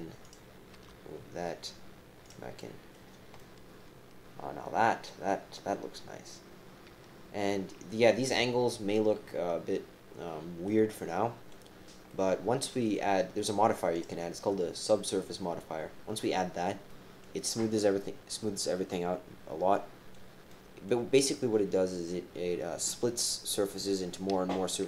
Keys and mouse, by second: 0.2 click, 0.7 g, 2.6 click, 3.4-4.4 drag, 4.4-8.1 right drag, 8.6 right click, 9.0-10.6 middle drag, 10.9 middle click, 12.1 right click, 13.9 right click, 16.2 right click, 16.9 right click, 19.7 right click, 19.8 click, 20.5 click.